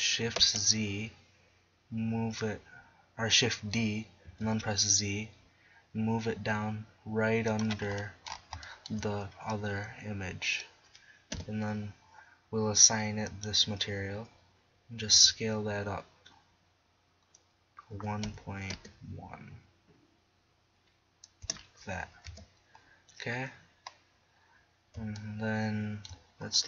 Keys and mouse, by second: 0.4 shift+d, 1.7-3.6 middle drag, 7.6-8.9 drag, 11.3 KP_7, 15.2 s, 22.3 Tab.